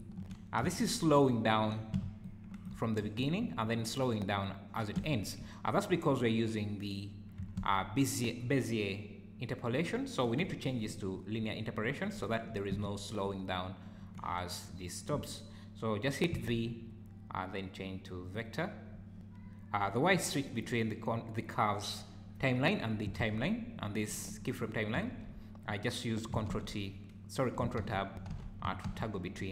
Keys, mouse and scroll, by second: 0.2 Escape, 0.6 space, 1.7 Escape, 2.2 shift+right click, 3.0 space, 4.9 Escape, 7.6 ctrl+Tab, 9.7 click, 10.8 `, 12.2 `, 12.7 space, 14.0 Escape, 16.5 v, 23.2 ctrl+Tab, 25.3 ctrl+Tab, 26.5 ctrl+Tab, 27.7 ctrl+Tab, 28.6 ctrl+Tab, 29.0 ctrl+Tab.